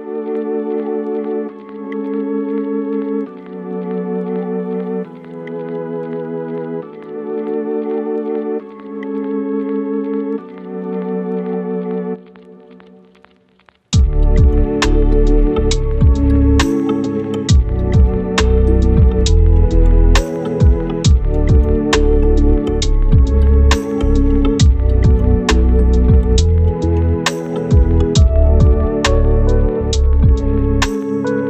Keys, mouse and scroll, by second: 1.5 right click, 2.0 click, 2.2 scroll down 1, 2.3 right click, 3.3 click, 3.4 right click, 3.5 right click, 4.1-5.1 scroll down 1, 5.1-6.6 scroll up 1, 6.6-13.2 right drag, 13.5 right click, 15.8 click, 16.0 scroll up 1, 16.2 right click, 16.7-18.7 drag, 21.4 scroll down 1, 21.6 right click, 22.3 scroll up 1, 22.4 right click, 22.7 click, 25.4 scroll down 1, 25.5-27.1 right drag, 27.6 click, 28.3 scroll down 1, 28.5-29.4 scroll up 1, 29.4 click, 30.1-30.5 scroll up 1, 30.5-31.4 drag.